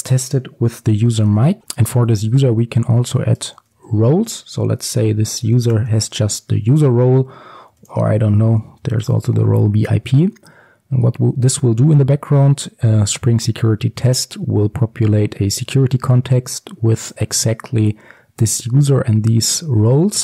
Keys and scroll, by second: 3.5 Return.